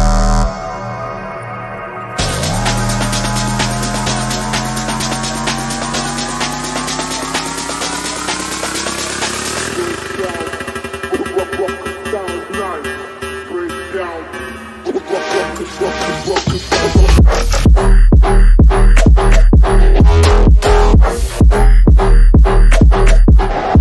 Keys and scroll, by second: 0.1 shift+F2, 0.6 Escape, 8.2 F3, 9.8 Escape, 12.3 F3, 12.8 F2, 13.2 Escape, 22.4 shift+F2, 23.0 Escape.